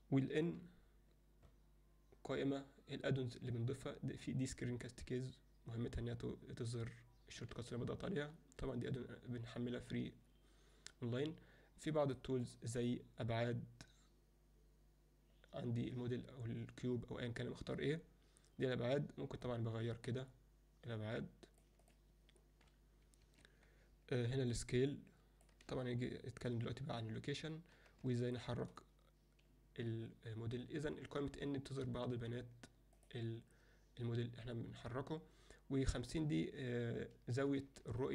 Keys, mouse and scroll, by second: 0.4 n, 7.3 n, 12.8 click, 19.6-21.8 drag, 24.5-25.5 drag, 25.8 ctrl+z, 28.2 shift+middle click, 31.4 n, 31.7 n, 33.0 click, 38.0-38.1 ctrl+middle drag.